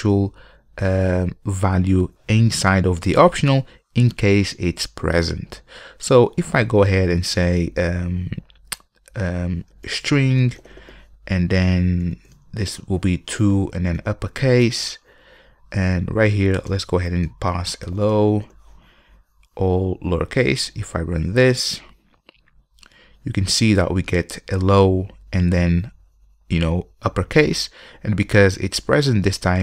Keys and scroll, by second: 14.8 Return, 21.7 ctrl+F5.